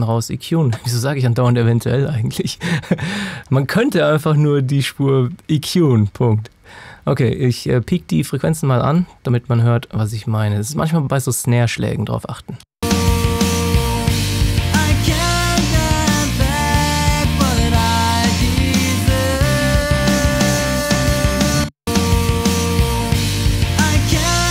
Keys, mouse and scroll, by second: 12.6 space, 14.3 click, 17.1 click, 21.5 space, 22.7 click.